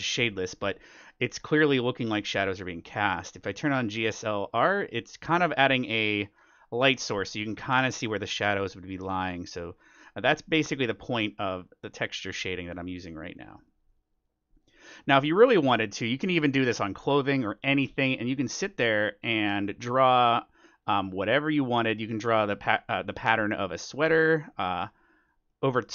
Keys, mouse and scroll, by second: 2.3-4.1 drag, 4.6-6.3 drag, 5.2-9.5 middle drag, 6.4 click, 9.5-16.7 drag, 10.0-11.7 middle drag, 13.4-15.1 middle drag, 15.3-17.6 middle drag, 17.6-19.3 middle drag, 18.6-25.9 drag, 19.6-21.3 middle drag, 21.5-22.1 scroll down 1, 22.1-23.0 scroll down 1, 23.0-23.4 scroll down 1, 23.6-25.9 middle drag.